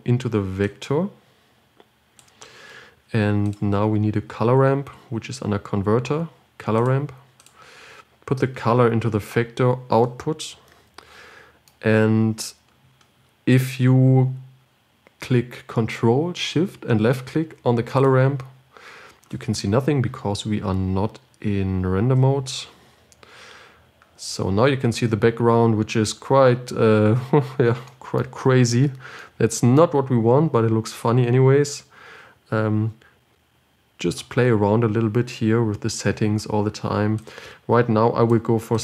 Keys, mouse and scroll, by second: 1.3 click, 18.6 ctrl+shift+click, 23.3 z, 31.6-35.5 drag, 37.6 click.